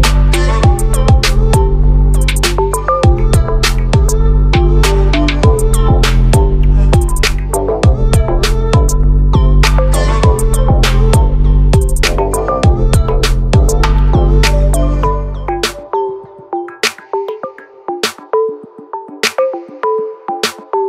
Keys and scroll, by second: 16.5 ctrl+0, 18.7 ctrl+=.